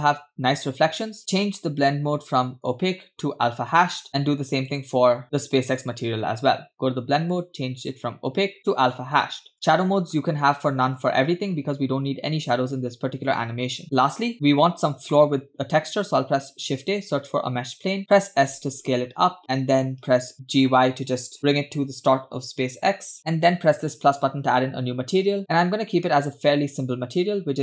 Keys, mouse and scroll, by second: 1.5-2.4 scroll down 2, 2.6-4.1 drag, 4.7 click, 5.2-5.7 scroll up 1, 5.7 click, 6.5-7.0 scroll down 2, 7.3 click, 7.8-9.0 drag, 9.5 click, 10.1-11.0 scroll up 1, 11.0 click, 11.5 scroll down 2, 12.4-13.5 drag, 13.8 shift+middle click, 14.7-15.0 scroll down 1, 15.1 shift+middle click, 16.6 shift+a, 18.5 s, 21.4 g, 24.1-25.1 drag, 25.6 scroll down 2, 26.1 middle click.